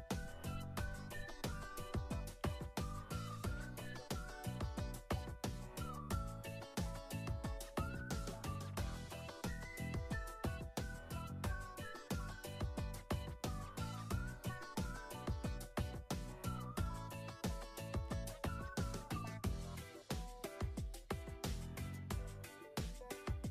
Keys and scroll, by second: 8.9 Escape.